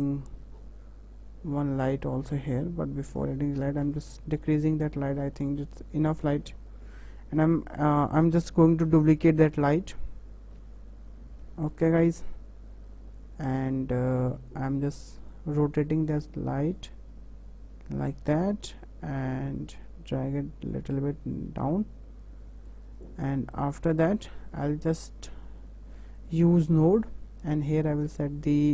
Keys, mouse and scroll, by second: 0.4-2.2 scroll down 2, 2.2-3.3 drag, 3.3 KP_0, 5.3-5.8 middle drag, 5.8-6.4 scroll up 2, 6.4-6.8 shift+middle drag, 6.8-7.1 scroll down 2, 7.5-8.0 scroll down 1, 9.0 shift+d, 13.9-15.2 shift+middle drag, 15.2 click, 18.5 w, 19.3-21.4 drag, 23.0 click, 23.5 click, 24.1 click, 26.2-27.7 drag.